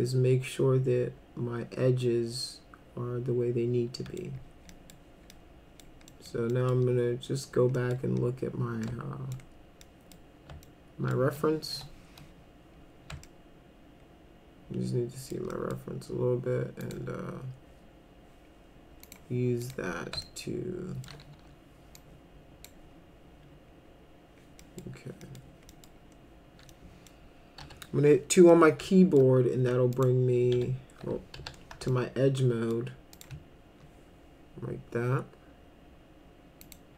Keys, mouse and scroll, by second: 4.7 middle click, 5.3 middle click, 6.1 middle click, 6.5 middle click, 7.7 middle click, 8.9 alt+middle click, 9.9 middle click, 10.6 alt+middle click, 11.7 p, 13.2-15.3 alt+middle drag, 15.5 middle click, 16.8 click, 19.0 click, 19.6 click, 20.2 alt+middle click, 21.4 w, 22.0 click, 24.6 middle click, 25.2 middle click, 25.7 middle click, 26.7 middle click, 27.6 2, 28.5 alt+middle click, 30.0 click, 31.4 2, 31.9 alt+middle click, 33.1 alt+click, 36.6 click.